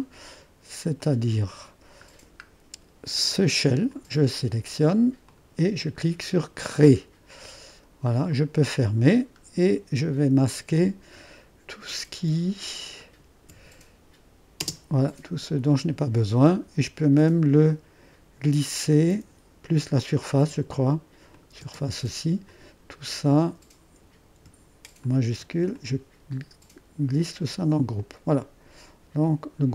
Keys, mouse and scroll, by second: 3.9 click, 5.3 click, 5.9 click, 6.8-8.6 drag, 9.3-10.5 middle drag, 9.3-10.5 scroll down 1, 10.7 click, 11.1-12.3 middle drag, 13.1 middle click, 14.6 space, 17.6-20.2 drag, 20.4 click, 21.4 click, 21.5 middle click, 21.7 space, 21.9-23.7 drag, 25.1-28.2 drag, 29.3-29.7 drag.